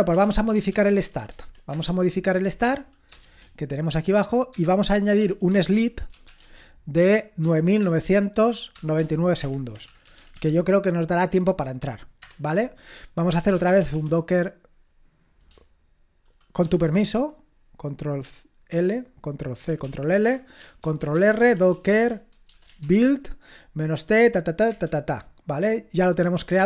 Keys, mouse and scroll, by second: 0.0-1.5 typing, 1.7 Return, 3.3 shift+g, 4.6-10.8 typing, 12.2 Return, 13.1-14.4 typing, 16.6 ctrl+l, 18.7 ctrl+l, 19.6 ctrl+c, 19.8 ctrl+l, 24.6 Return.